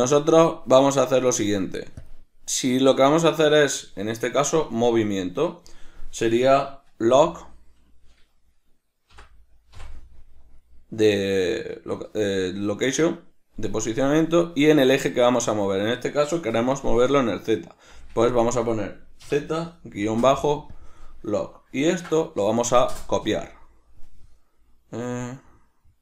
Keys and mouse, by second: 2.2-26.0 drag, 18.3 Left.